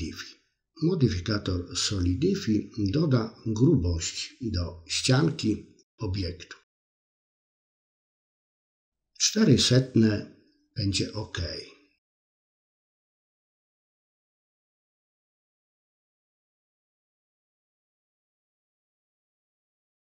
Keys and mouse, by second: 2.8-8.9 drag, 10.1 middle click, 11.6-12.9 middle drag, 14.7 click.